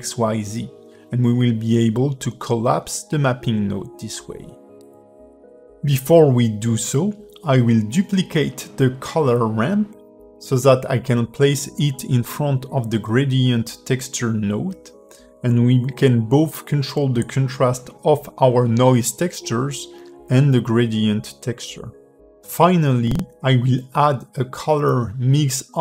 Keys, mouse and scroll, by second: 0.3 click, 1.7 click, 10.1 click, 12.1 click, 12.8 click, 13.8 g, 15.6 click, 15.9 g, 18.2 click, 18.8 shift+d, 20.9 click, 22.8 shift+middle click, 23.7 ctrl+shift+click.